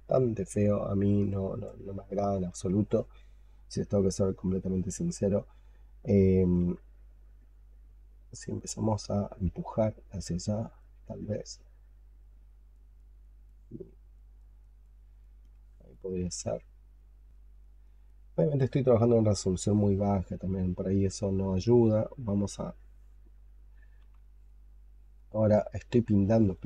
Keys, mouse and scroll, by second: 0.6 alt+click, 6.5 x, 7.6 double click, 8.0 double click, 8.3 double click, 8.7 double click, 9.0 double click, 9.2 double click, 9.5 double click, 9.8 double click, 10.1 double click, 10.5 double click, 10.7 double click, 11.0 double click, 11.5 double click, 11.8 double click, 12.1 double click, 12.4 double click, 12.6 double click, 12.9 double click, 13.1 double click, 13.3 double click, 13.7 double click, 14.0 double click, 14.3 double click, 14.5 double click, 14.7 double click, 15.1 double click, 15.3 double click, 16.8 double click, 17.2 double click, 17.5 double click, 17.7 double click, 17.9 double click, 18.2 double click, 18.9 alt+click, 20.1 alt+click, 23.9 x.